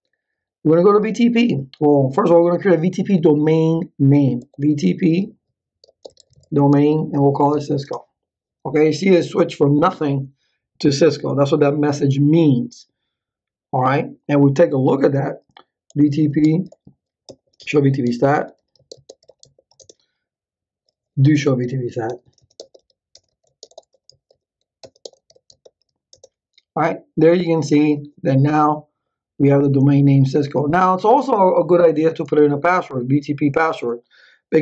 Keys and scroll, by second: 4.1-8.0 typing, 15.6-26.4 typing.